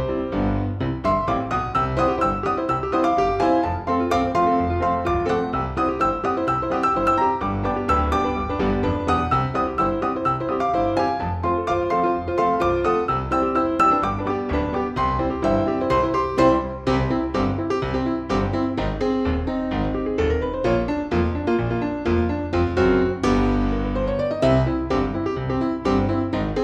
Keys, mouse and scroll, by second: 0.2 shift+click, 1.3 shift+click, 1.9 shift+click, 2.9 shift+click, 6.9 shift+a, 8.9-10.0 drag, 10.7 click, 12.4 click, 16.1-18.7 shift+drag, 19.6 shift+click, 20.6-24.6 shift+drag, 24.9 shift+click.